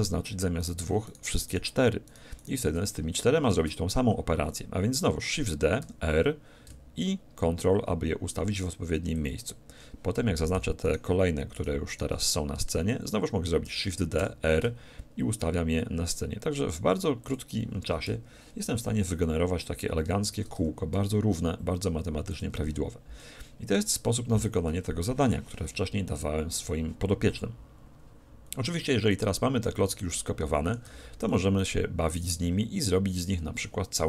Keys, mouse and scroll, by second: 3.5 shift+d, 9.3-11.0 drag, 10.5-13.7 right drag, 13.7 shift+d, 17.3-19.1 drag, 20.2 shift+d, 22.4-24.4 drag, 23.2-25.8 middle drag, 28.9-33.0 middle drag, 30.9 a.